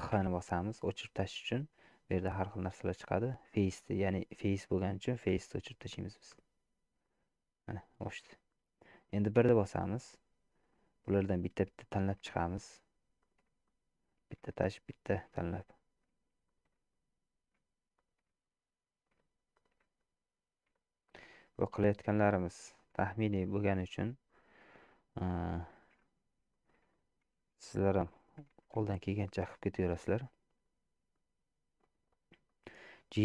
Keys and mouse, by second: 0.1 x, 5.3 x, 7.1-8.2 middle drag, 9.5 1, 11.1 middle click, 12.1 middle click, 13.3 shift+click, 13.7-14.9 middle drag, 14.9 shift+click, 15.2 shift+middle click, 15.4-16.5 middle drag, 16.5 shift+click, 16.8 shift+middle click, 17.0-18.0 middle drag, 18.0 shift+click, 18.3 shift+middle click, 18.5-19.6 middle drag, 19.6 shift+click, 19.8 shift+middle click, 20.1-21.1 middle drag, 21.1 shift+click, 21.6 middle click, 22.8 shift+click, 23.4 middle click, 24.1 shift+click, 25.5 middle click, 26.5 shift+middle click, 27.0 middle click, 28.4 g, 31.3 middle click, 32.5 shift+middle click.